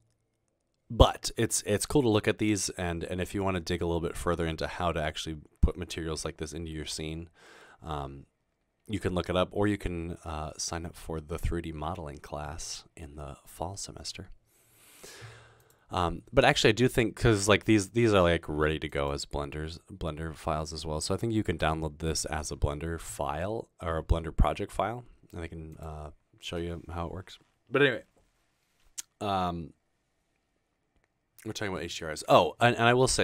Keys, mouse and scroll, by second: 2.1 scroll down 2.